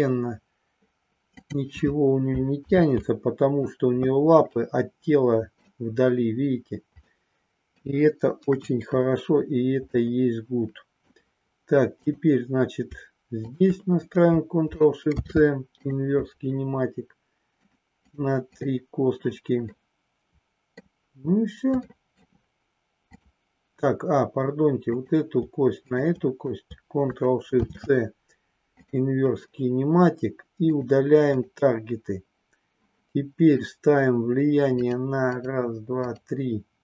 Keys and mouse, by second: 1.5 click, 2.6 ctrl+z, 4.5-5.7 middle drag, 7.0 middle click, 8.5 KP_1, 9.8-11.2 middle drag, 12.1 click, 13.4 shift+click, 15.0 ctrl+shift+c, 17.6 click, 18.0 click, 19.7-20.8 middle drag, 21.8 shift+middle click, 23.0 click, 24.8 click, 25.8 shift+click, 27.5 ctrl+shift+c, 30.6 click, 34.9 click, 35.3 click, 36.1 click.